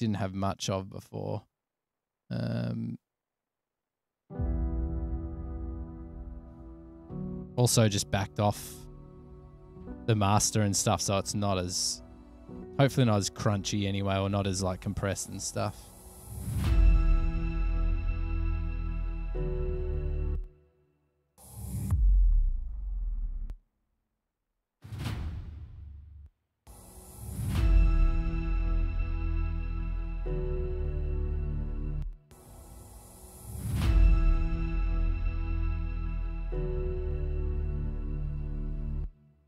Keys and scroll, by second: 0.7 super+], 0.8 super+], 2.3 super+s, 4.2 space, 7.0 super+[, 7.1 super+[, 20.6 space, 21.5 s, 23.8 space, 24.3 s, 24.4 space, 26.5-26.9 typing, 29.6 super+], 29.8 super+], 32.3 space, 32.4 space, 37.2 super+[, 37.3 super+[, 39.3 typing.